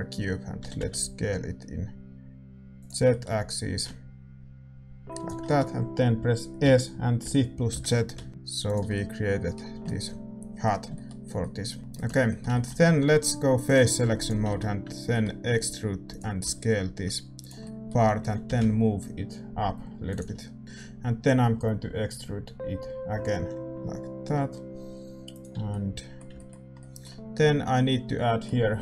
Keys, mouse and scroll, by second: 0.6 s, 3.0 middle click, 3.7-5.4 drag, 5.4-7.2 middle drag, 6.6 s, 8.9-19.5 middle drag, 11.9-14.0 right drag, 12.0 Tab, 13.6-16.0 drag, 14.0 a, 14.1-16.0 right drag, 16.0 e, 16.4 s, 18.2 g, 20.6-23.7 middle drag, 20.6 e, 25.6-28.8 middle drag.